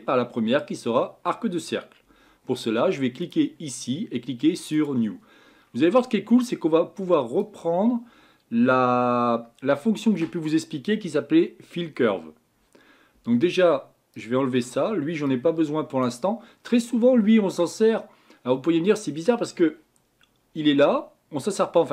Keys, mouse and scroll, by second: 3.2 click, 4.8-14.6 drag.